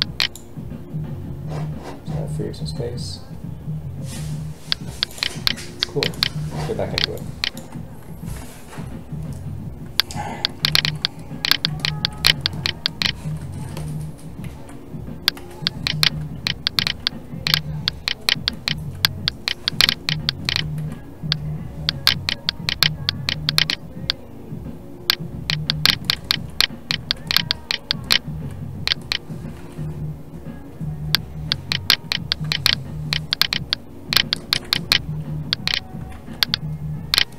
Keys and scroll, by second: 4.8 space, 14.4 alt+a, 20.7 alt+a, 29.6 alt+a, 36.1 ctrl+z.